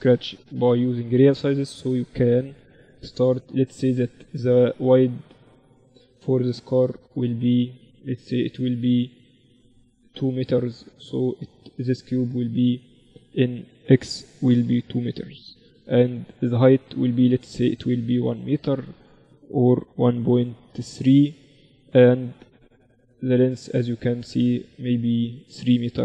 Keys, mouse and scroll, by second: 11.9-13.7 drag, 11.9-13.5 middle drag, 19.1-21.1 drag, 23.5-26.0 middle drag, 25.0-26.0 drag.